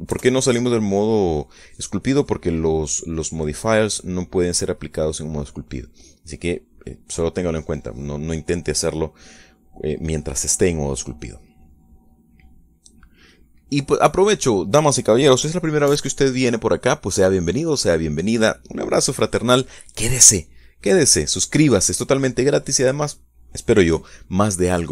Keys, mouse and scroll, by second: 0.8 KP_Decimal, 1.0 KP_1, 1.6 KP_Enter.